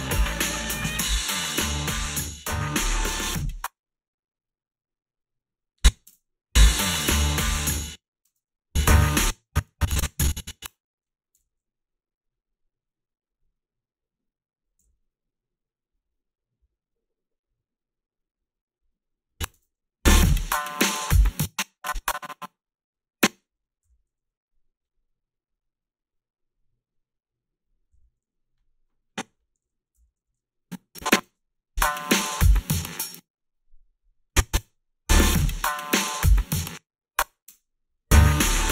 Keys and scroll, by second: 3.4 space, 6.1 space, 7.7 space, 8.2 space, 9.0 space, 11.4 g, 11.4 space, 14.8 f, 19.6 space, 21.4 space, 29.3 o, 29.9 b, 30.2 a, 32.9 space, 34.6 space, 36.5 space, 37.4 space.